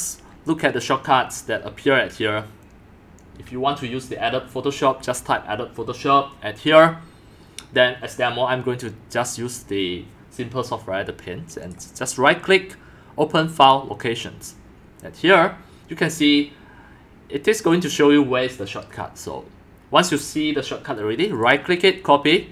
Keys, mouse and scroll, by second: 11.7-18.8 drag, 21.4-22.4 right drag, 22.4 click.